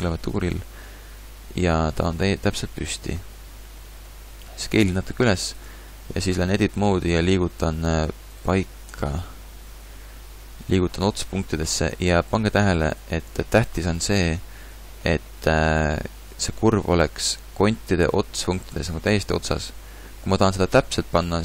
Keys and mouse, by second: 4.6 s, 5.6 Tab, 7.9 g, 8.9 KP_3, 10.2 g, 16.7 g, 17.1-18.3 middle drag.